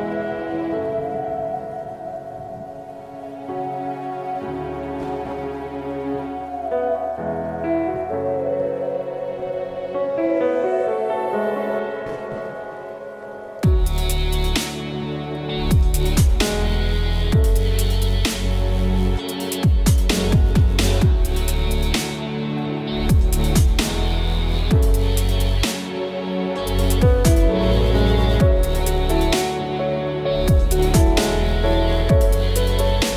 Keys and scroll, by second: 27.4 Return.